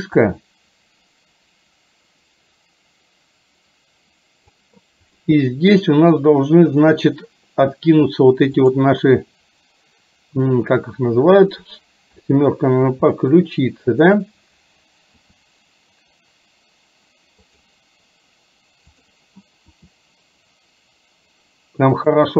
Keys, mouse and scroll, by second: 0.3-4.6 drag, 5.3-5.7 middle drag, 12.2 KP_7, 13.3-14.1 shift+middle drag, 15.2 r, 19.1 click, 19.7 r.